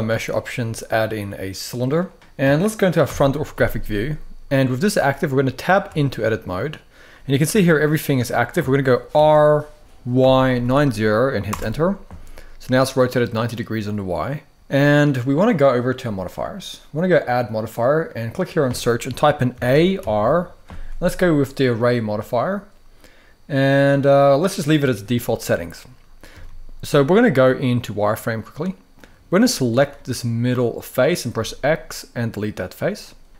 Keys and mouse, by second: 2.8 KP_1, 5.4 Tab, 7.2 g, 8.8 r, 9.9 y, 10.3 9, 10.4 0, 11.2 Return, 15.8 click, 16.9-21.6 drag, 26.0 z, 28.8-29.4 drag, 29.7-30.7 middle drag, 31.1 x, 33.2 middle click.